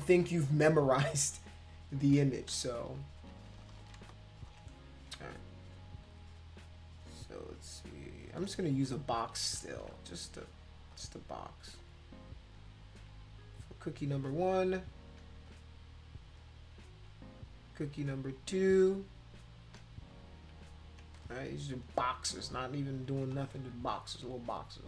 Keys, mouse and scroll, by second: 2.5 ctrl+z, 2.7 ctrl+z, 2.9 ctrl+z, 3.2 ctrl+z, 3.4 ctrl+z, 3.6 ctrl+z, 3.7 ctrl+z, 8.2 click, 8.9 shift+click, 9.6 ctrl+z, 10.2 click, 10.9 shift+click, 11.8 shift+click, 12.5 shift+click, 14.8 click, 15.5 shift+click, 16.4 shift+click, 18.0 click, 18.7 click, 19.5 click, 20.1 shift+click, 21.1 space, 21.2-22.5 drag, 23.2 space, 23.3 click, 23.9 click, 24.6 click.